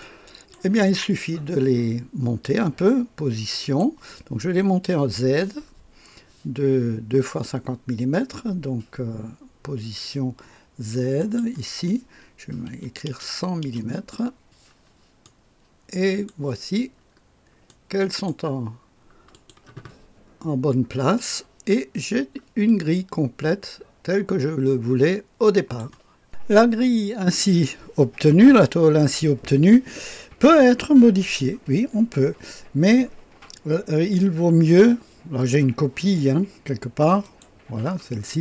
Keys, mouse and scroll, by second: 0.0-1.3 right drag, 3.5 click, 11.2 click, 12.7 KP_1, 13.1 KP_0, 13.6 KP_0, 15.2-17.2 right drag, 17.2-18.3 scroll up 1, 17.7-19.3 right drag, 19.3 click, 20.4-21.6 scroll up 1, 21.9-22.7 scroll down 1, 22.7 click, 23.5 click, 24.0-25.8 drag, 37.2 click.